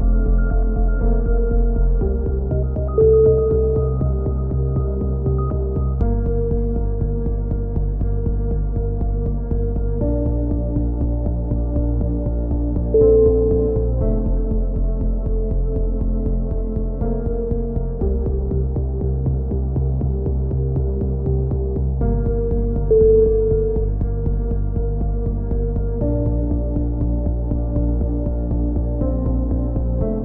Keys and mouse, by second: 0.1 KP_3, 0.8 Tab, 1.3 z, 2.1 click, 4.5 right click, 4.7 a, 5.3-6.3 middle drag, 6.3 ctrl+KP_7, 7.1 middle click, 7.5-10.0 typing, 7.9 middle click, 11.1-12.9 drag, 14.3 ctrl+KP_7, 14.3 click, 15.0 middle click, 15.8-17.4 drag, 16.8 z, 17.4 z, 18.0-19.0 drag, 20.3 click, 21.4 z, 22.5 click, 23.3 middle click, 24.0 click, 26.0 z, 26.5 a, 27.7 z, 28.3 middle click.